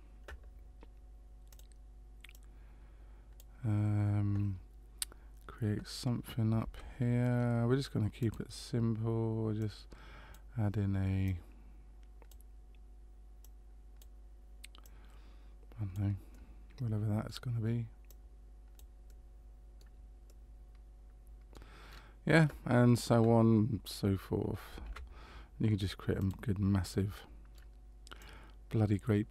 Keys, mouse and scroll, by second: 1.5 click, 2.3 click, 6.6 shift+a, 9.6 click, 11.2 click, 13.4 click, 14.8 click, 16.3 middle click, 18.1 click, 19.0 middle click, 20.2 middle click, 21.9-22.6 scroll down 1, 22.6 scroll down 2, 24.8 shift+a, 26.9 middle click, 28.2 click.